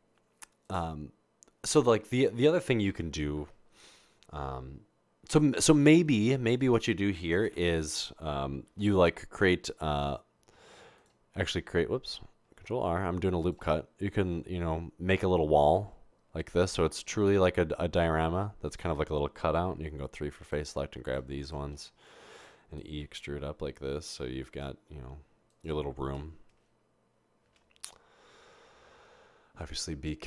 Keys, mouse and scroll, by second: 7.6 Tab, 8.7 ctrl+r, 15.7 ctrl+r, 21.8 typing, 23.0 typing, 27.6 0.